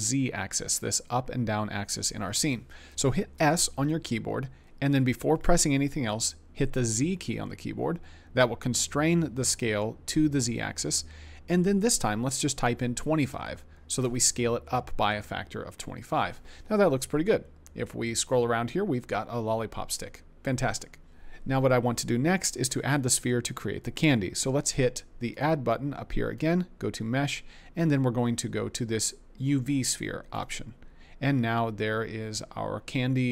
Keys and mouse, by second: 3.3 s, 7.1 z, 12.9 2, 13.2 5, 14.0 Return, 25.4-30.4 drag.